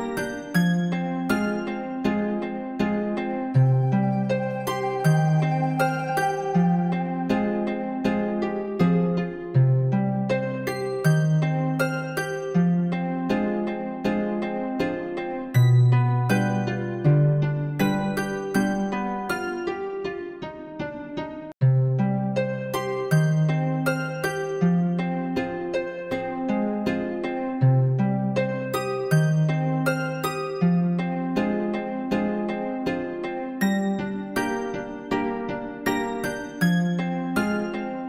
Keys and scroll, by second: 6.7 ].